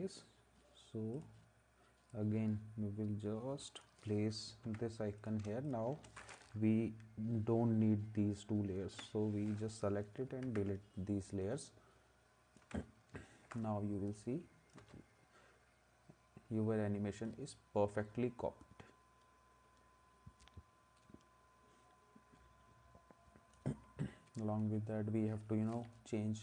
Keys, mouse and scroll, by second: 4.6 ctrl+s, 8.9 Delete, 10.4 ctrl+s, 14.8 space, 25.7 v.